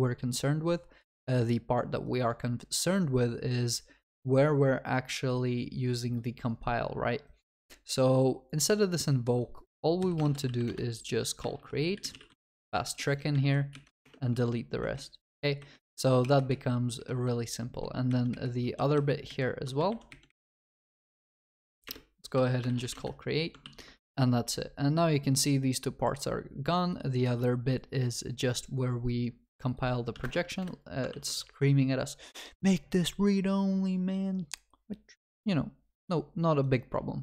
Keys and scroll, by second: 10.7 Return, 23.0 Return, 23.6 ctrl+s, 30.3 alt+Return, 31.1 ctrl+s.